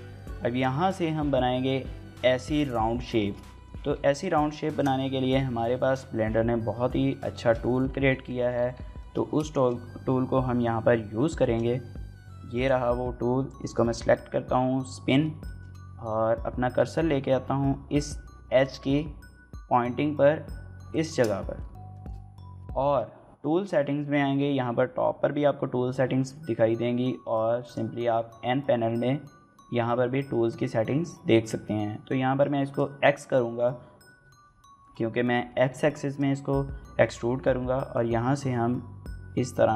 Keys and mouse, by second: 0.3 shift+middle click, 0.5 middle click, 3.0 shift+click, 3.2 click, 3.5 g, 3.7 z, 4.5 shift+click, 5.4 KP_1, 6.0 KP_3, 7.1 shift+click, 8.0 shift+click, 8.8 shift+click, 9.4 shift+click, 11.2 shift+middle click, 12.4 click, 15.2 shift+middle click, 20.7 shift+right click, 21.8 shift+middle click, 25.8 n, 27.4 click, 32.4 click, 37.7-39.7 drag.